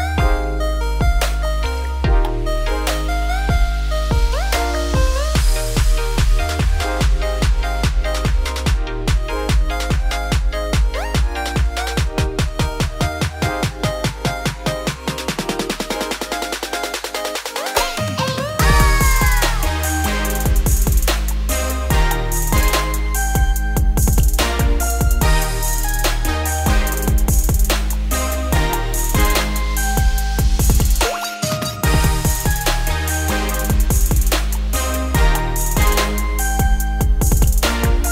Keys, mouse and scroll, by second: 0.5 Tab, 0.6 click, 0.8 Tab, 1.1 middle click, 1.4 a, 4.4 e, 6.8 scroll down 1, 7.1-8.1 middle drag, 8.1 ctrl+z, 8.5 middle click, 9.3 ctrl+z, 9.8 middle click, 10.3 a, 10.5 scroll up 1, 10.8 middle click, 11.2 alt+e, 16.4 middle click, 17.1 ctrl+e, 18.2 ctrl+r, 19.4 click, 19.7 3, 19.9 click, 20.1 middle click, 20.8 ctrl+click, 21.2 middle click, 21.5 g, 22.8 Tab, 23.7 ctrl+1, 24.2-25.2 middle drag, 25.2 ctrl+2, 25.7 Tab, 26.0 middle click, 26.5 click, 27.2 2, 27.5 alt+click, 28.2 `, 28.7 shift+middle click, 29.0-29.4 scroll up 4, 29.4 g, 32.5 Tab, 32.6 scroll down 2, 32.8-34.4 middle drag, 34.4 ctrl+0, 35.4 Tab, 35.5 middle click, 35.8 `, 36.6-37.2 scroll up 1, 37.2 g.